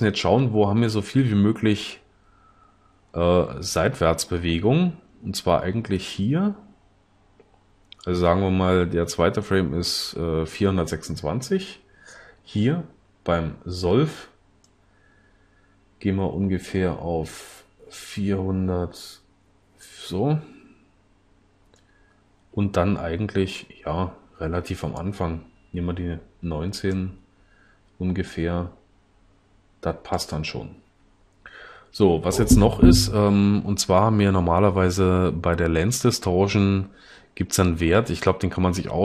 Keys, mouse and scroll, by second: 1.8-4.6 drag.